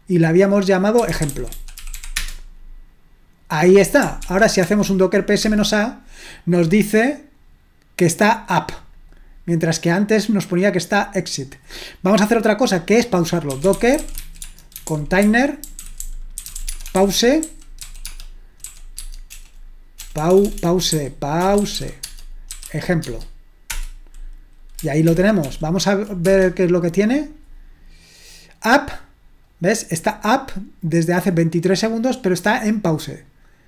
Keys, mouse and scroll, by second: 0.9-2.4 typing, 4.2 ctrl+p, 4.6 ctrl+p, 5.4 Return, 8.6-9.7 drag, 10.3-12.1 drag, 13.3-24.4 typing, 18.9 Tab, 25.5 ctrl+p, 26.0-26.9 typing, 29.4-31.3 drag, 32.2-33.6 drag.